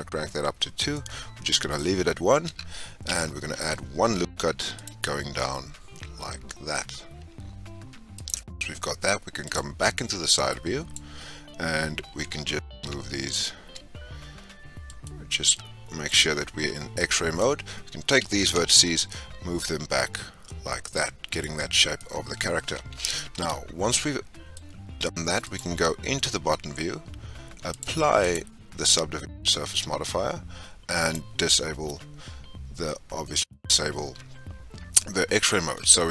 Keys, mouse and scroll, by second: 0.8 scroll down 1, 0.9-1.8 middle drag, 1.8 scroll up 3, 2.3 scroll down 1, 3.1 Tab, 4.1 ctrl+r, 9.4 click, 10.5 click, 11.4-12.1 scroll up 1, 12.1-12.5 scroll up 1, 12.5 g, 16.0 click, 18.1 g, 21.8 scroll down 1, 21.9-23.0 middle drag, 23.0 Tab, 23.8-25.4 middle drag, 25.4 click, 25.9-26.8 scroll up 5, 27.7-30.8 drag, 31.0 click, 31.6-32.4 scroll up 4, 35.6 Tab.